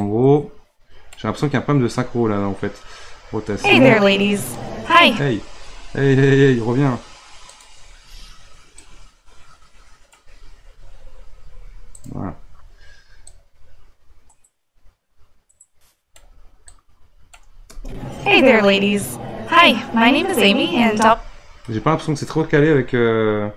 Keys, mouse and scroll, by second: 0.0-3.4 drag, 3.4 space, 4.6 click, 5.0 space, 7.4 click, 8.8-11.2 drag, 11.2 r, 13.3-17.7 drag, 17.7 space, 21.0 space, 23.0 scroll down 4, 23.5 scroll up 4.